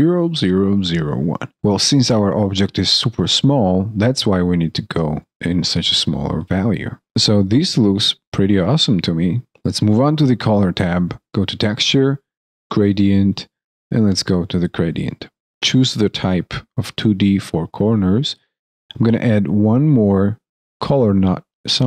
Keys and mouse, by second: 7.0 alt+middle click.